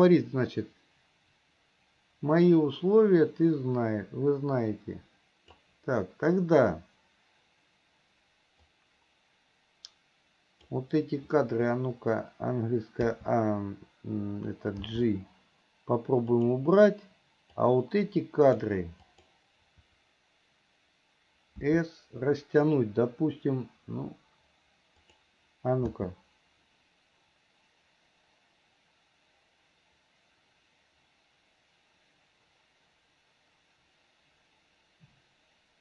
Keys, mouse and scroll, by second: 8.8-10.8 drag, 17.9 click, 19.3 click.